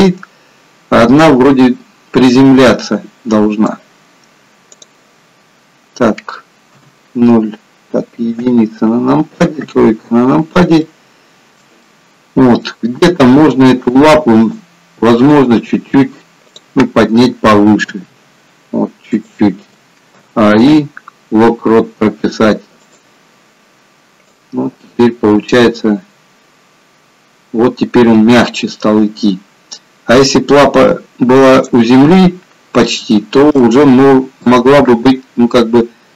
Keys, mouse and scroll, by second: 2.8 middle click, 4.8 click, 5.4-5.8 scroll down 2, 6.8 KP_0, 8.5 KP_1, 9.7 KP_3, 10.9 shift+middle click, 11.9 middle click, 14.4 click, 15.3 click, 16.5 click, 18.0 g, 20.3 a, 20.8 i, 24.5 click, 33.7 shift+middle click.